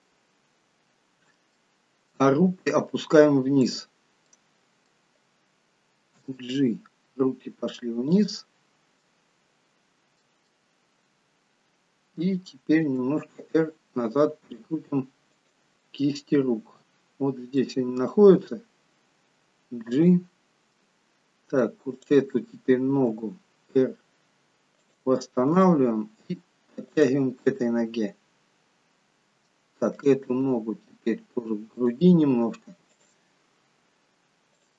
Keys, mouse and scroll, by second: 1.7 middle click, 2.7-3.2 scroll down 1, 3.7 click, 4.3 middle click, 6.2 g, 8.5-9.6 scroll up 4, 9.0 middle click, 10.5 middle click, 12.9 r, 15.9 middle click, 18.4 g, 20.8 middle click, 22.1 click, 23.2 r, 25.6 g, 27.5 middle click, 30.0 click, 30.3 g, 33.0 click, 34.6 click.